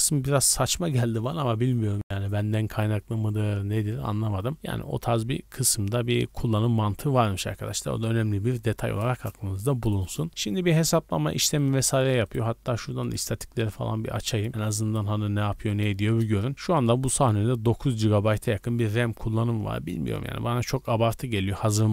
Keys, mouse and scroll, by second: 12.2-13.1 right drag, 13.6-14.4 right drag, 14.8-15.8 right drag.